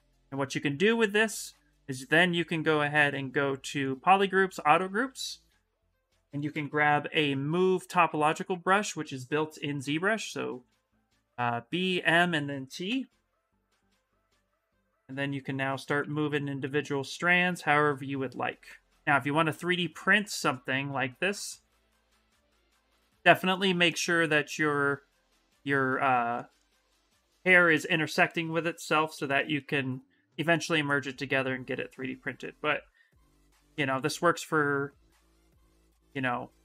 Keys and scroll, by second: 1.0 2, 5.2 s, 6.3 b, 10.9 m, 13.2 s, 15.7 ctrl+z, 16.0 s, 33.5 ctrl+z, 33.7 ctrl+z.